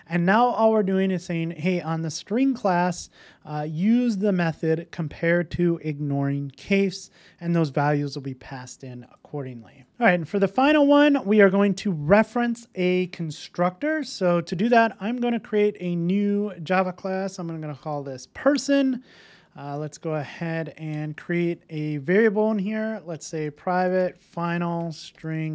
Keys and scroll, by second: 9.9 super+v.